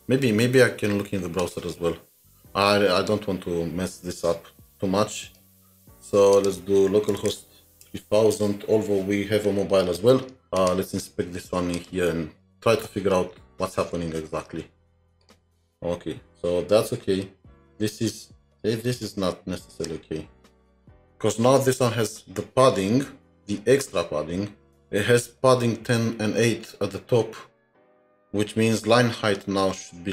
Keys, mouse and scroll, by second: 7.1-7.9 typing, 10.6 Return, 10.6 right click, 13.5 right click, 13.6-14.5 scroll down 21.